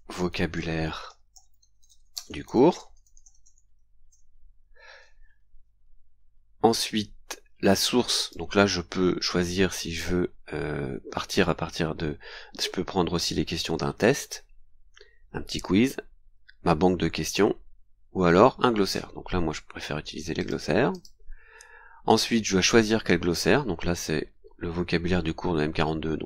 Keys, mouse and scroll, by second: 0.0-4.4 typing, 5.0-5.4 scroll down 2, 8.2 click, 20.4 click, 20.9 click, 22.1 click.